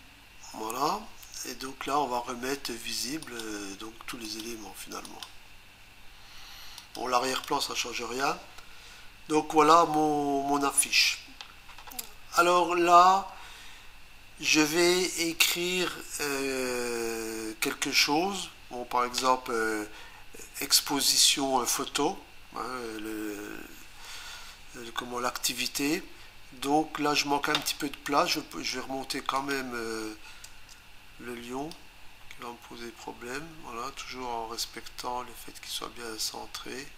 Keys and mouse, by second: 3.3 click, 4.3 click, 5.1 click, 6.8 click, 7.3 click, 29.4 click, 30.5 Return, 31.8 click.